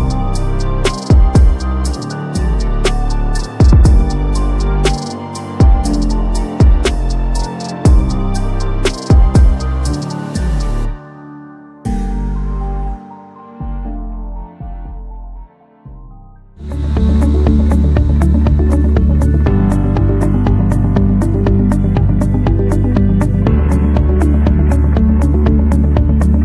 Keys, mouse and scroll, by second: 1.7-7.8 drag, 7.8 space, 10.2-16.3 drag.